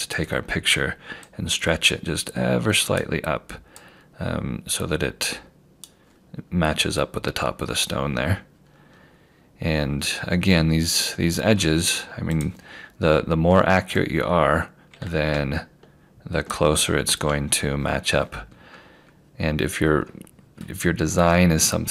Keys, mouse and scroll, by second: 1.3 click, 7.7 scroll down 1, 8.6 scroll up 1, 9.9 scroll down 1, 12.4 click, 15.3 q, 18.5 scroll down 1, 19.7 scroll up 1, 21.2 scroll down 1.